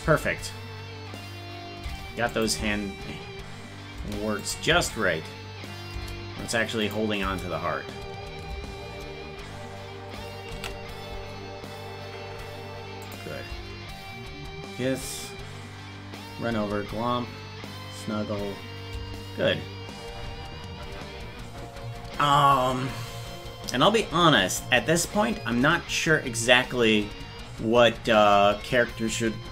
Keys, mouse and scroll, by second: 0.0 space, 2.3 click, 2.6 space, 4.4 click, 4.7 space, 6.9 click, 7.2 space, 10.7 ctrl+s, 10.7 space, 13.1 click, 13.5 space.